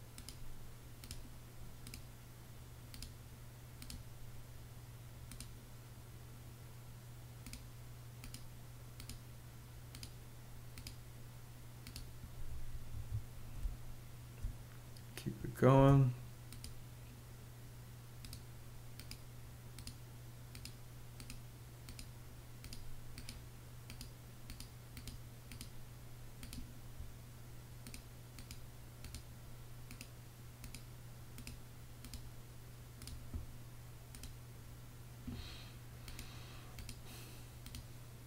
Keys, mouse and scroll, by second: 12.4 Escape, 13.1 space, 15.2 space.